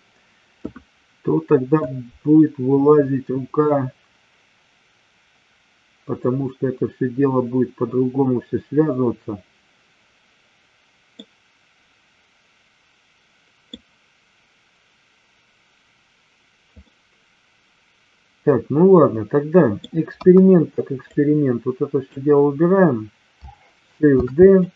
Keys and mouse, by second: 11.1-13.7 middle drag, 16.8-19.8 middle drag, 20.0 KP_1, 21.1-22.1 drag, 24.1 shift+d, 24.5 click.